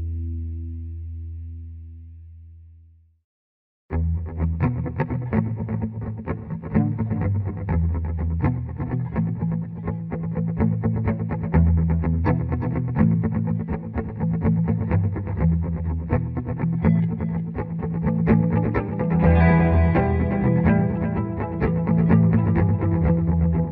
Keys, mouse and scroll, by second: 1.0 click, 1.5 click, 3.1-9.3 drag, 16.1 click, 21.9 click, 22.0 click.